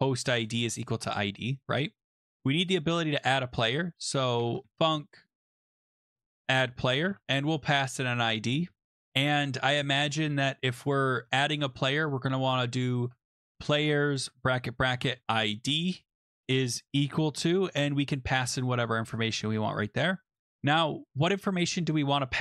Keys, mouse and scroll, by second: 0.0-2.4 typing, 1.6 Escape, 2.1 Return, 4.1-9.2 typing, 10.8 click, 11.3 Return, 11.5 Down, 11.7 Down, 12.7-15.5 typing, 16.8-18.1 typing, 20.7 =, 20.7 {, 21.2-22.4 drag.